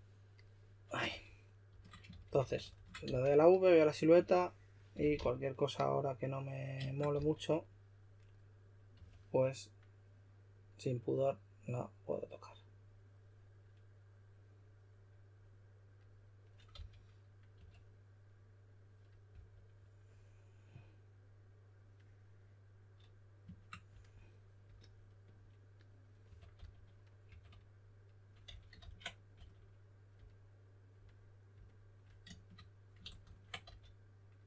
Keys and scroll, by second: 1.0-3.3 typing, 4.7-5.6 typing, 7.1 shift+s, 8.7-9.4 typing, 16.7-17.5 typing, 19.3 typing, 26.3-27.3 typing, 28.4 s, 28.8 super+z, 29.3 s, 33.0 super+z, 33.2 super+z, 33.6 s.